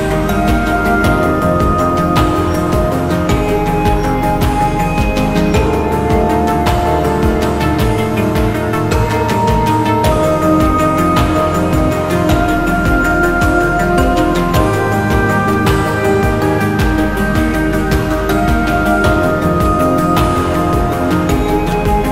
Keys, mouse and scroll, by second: 12.0-12.5 scroll up 1, 12.5 scroll down 1, 12.9 alt+click, 14.0 scroll down 1, 14.6 scroll up 2, 14.8 alt+middle click, 15.1 alt+click, 20.9 scroll up 1, 21.3 scroll down 1, 22.0 alt+middle click.